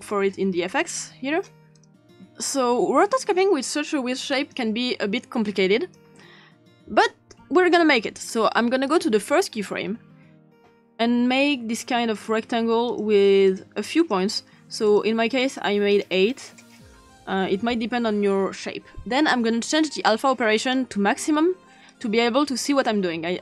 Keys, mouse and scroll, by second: 0.8 click, 1.7 click, 4.4 click, 5.5-6.0 drag, 8.9 click, 12.1 click, 12.9 click, 16.7 right click, 20.6 click, 21.9 click.